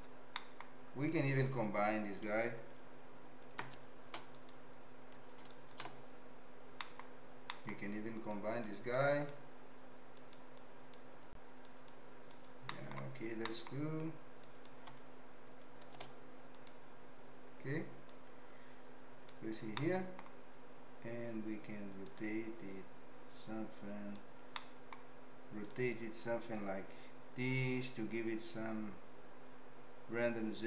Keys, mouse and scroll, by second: 0.3 middle click, 1.3 click, 3.6 shift+d, 5.6 ctrl+shift+right click, 6.9 middle click, 7.6 middle click, 8.4 click, 9.0 click, 10.2 click, 10.6 click, 11.6 click, 12.7 middle click, 13.6 middle click, 14.5 click, 15.8 shift+d, 18.1 click, 19.7 middle click, 22.0-24.1 drag, 24.7 middle click, 25.8-30.6 drag.